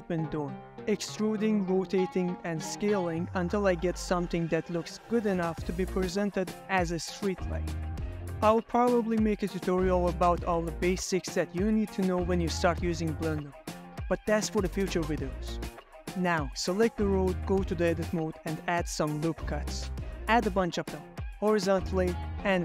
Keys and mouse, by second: 0.0-3.6 typing, 0.1 Escape, 0.3 middle click, 1.8 middle click, 1.9 shift+click, 2.4 Escape, 2.5 ctrl+z, 2.6 ctrl+z, 2.8 click, 3.5 shift+click, 3.7 Escape, 3.7 click, 3.8 Tab, 3.8 click, 3.9 ctrl+z, 4.1 shift+click, 4.4 click, 4.7 middle click, 4.8-10.4 typing, 5.1 ctrl+middle click, 5.4 middle click, 5.7 Tab, 5.9 alt+2, 6.3 middle click, 7.3 middle click, 7.8 Escape, 7.8 middle click, 8.1 middle click, 8.1 click, 8.3 Escape, 8.5 Escape, 8.6 click, 9.3 Tab, 9.5 right click, 9.6 middle click, 9.9 middle click, 10.1 middle click, 10.3 middle click, 10.6 Tab, 10.7 click, 10.8 ctrl+middle click, 11.1 click, 11.3 ctrl+j, 11.5 shift+click, 11.8 ctrl+click, 11.8 g, 11.8 x, 11.9 middle click, 11.9 y, 12.1 ctrl+drag, 12.2 Tab, 12.3 Tab, 12.3 click, 13.7 middle click, 14.1 middle click, 14.6 ctrl+middle click, 14.9 middle click, 15.8 ctrl+r, 18.2 Escape, 19.3 ctrl+middle click, 21.5 click, 21.9 Tab, 22.1 ctrl+r, 22.3 Escape, 22.4 click.